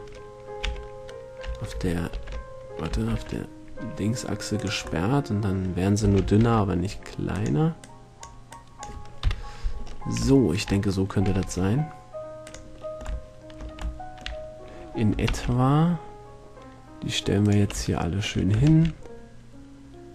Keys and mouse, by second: 0.8 s, 4.8 click, 6.2 s, 7.6-9.4 drag, 9.4 KP_7, 11.6 g, 15.5 shift+d, 15.9-17.6 drag, 17.6 shift+d, 17.7-18.8 drag, 18.8 shift+d.